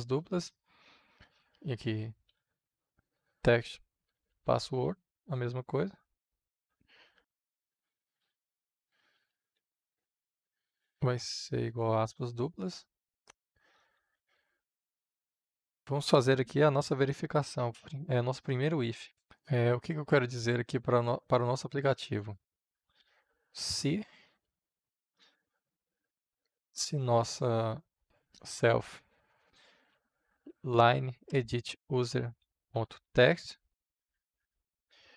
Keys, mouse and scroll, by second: 2.0-5.1 typing, 6.5 w, 7.9-9.7 typing, 11.9 shift+~, 12.9 Right, 14.1 Return, 20.0-22.9 drag, 22.9 i, 24.4-26.7 typing, 28.0-31.0 typing, 28.2 Return, 32.0-34.1 typing.